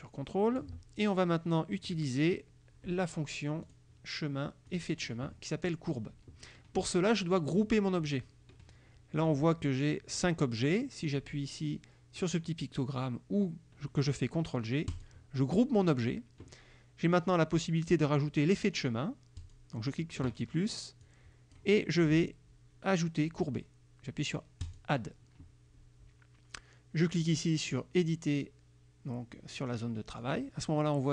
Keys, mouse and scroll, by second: 3.8 click, 4.8 click, 15.0 click, 19.5 click, 21.1 click, 24.7 click, 30.2 click.